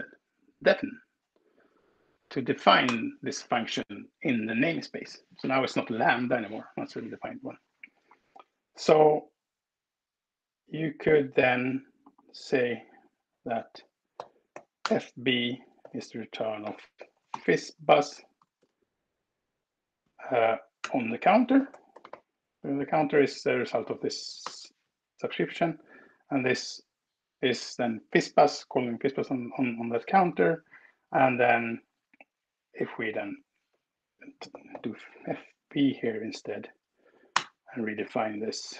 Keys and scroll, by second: 2.7 alt+Return, 12.6 Return, 14.1-17.9 typing, 18.2 Return, 20.7-22.4 typing, 24.4 ctrl+Return, 25.0 Escape, 25.6 Down, 34.2-35.1 typing, 35.4 Escape, 37.0 alt+Return.